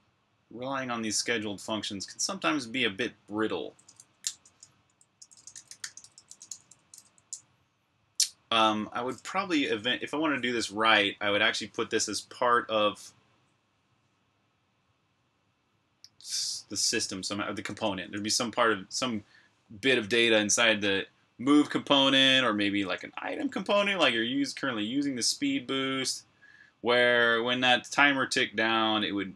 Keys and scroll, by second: 4.6-7.2 typing, 22.0 typing, 23.0 BackSpace.